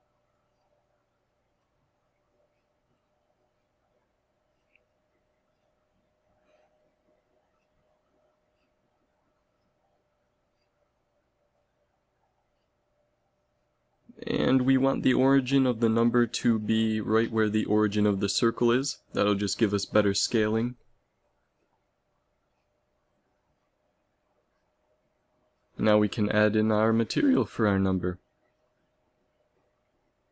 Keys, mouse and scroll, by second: 0.7-2.5 drag, 1.0 a, 2.5 ctrl+s, 6.5 shift+s, 10.2 ctrl+alt+shift+c, 15.7 ctrl+alt+shift+c, 17.7 s, 19.7 a, 20.8 ctrl+s, 25.8 click.